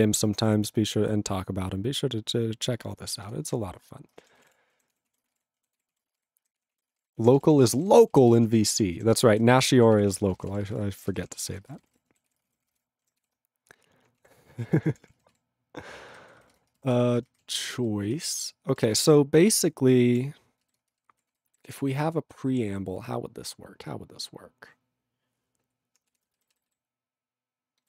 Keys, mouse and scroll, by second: 2.9 Return, 3.3 click, 3.3 click, 4.1 ctrl+space, 4.2 ctrl+a, 4.4 ctrl+g, 4.5 ctrl+e, 4.9 ctrl+s, 5.1 ctrl+a, 5.2 ctrl+space, 5.3 ctrl+e, 5.3 ctrl+g, 5.8 ctrl+s, 5.9 ctrl+a, 6.0 ctrl+space, 6.1 ctrl+e, 6.2 ctrl+g, 6.6 ctrl+s, 6.7 ctrl+a, 6.9 ctrl+space, 6.9 ctrl+e, 7.0 ctrl+g, 7.4 ctrl+s, 7.5 ctrl+a, 7.7 ctrl+space, 7.7 ctrl+e, 7.8 ctrl+g, 8.3 ctrl+s, 8.5 ctrl+a, 8.6 ctrl+space, 8.7 ctrl+e, 8.7 ctrl+g, 9.1 ctrl+s, 9.3 ctrl+a, 9.4 ctrl+space, 9.6 ctrl+e, 10.0 ctrl+s, 10.1 ctrl+p, 10.3 ctrl+space, 10.3 ctrl+e, 10.4 ctrl+n, 10.5 ctrl+e, 10.5 ctrl+n, 10.7 ctrl+e, 10.7 ctrl+g, 11.1 ctrl+s, 11.2 ctrl+p, 11.3 ctrl+a, 11.4 ctrl+p, 11.5 ctrl+space, 11.6 ctrl+e, 11.7 ctrl+n, 11.9 ctrl+e, 11.9 ctrl+g, 12.3 ctrl+s, 12.4 ctrl+space, 12.5 ctrl+a, 12.5 ctrl+p, 12.7 ctrl+g, 12.8 ctrl+e, 13.2 ctrl+s, 14.3 ctrl+space, 14.4 ctrl+n, 14.6 ctrl+e, 14.6 ctrl+g, 14.8 ctrl+p, 15.4 ctrl+s, 16.1 ctrl+f, 16.6 ctrl+space, 17.0 ctrl+alt+f, 17.9 ctrl+alt+b, 18.1 ctrl+alt+f, 18.2 ctrl+alt+b, 18.3 ctrl+alt+f, 18.9 ctrl+g, 19.0 ctrl+p, 20.6 ctrl+b, 20.9 ctrl+space, 21.2 ctrl+alt+f, 21.3 ctrl+g, 21.7 ctrl+s, 26.2 ctrl+e, 26.5 alt+b.